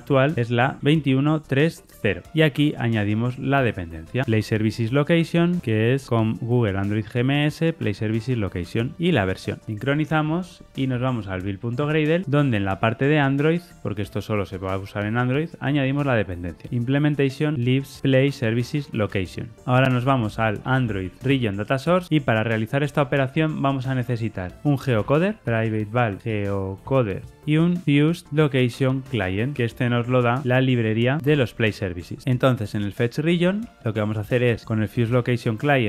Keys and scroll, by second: 0.3 ctrl+shift+Left, 4.2 Tab, 9.6 shift+super+o, 16.6 Tab, 31.2 Tab, 35.0 Return.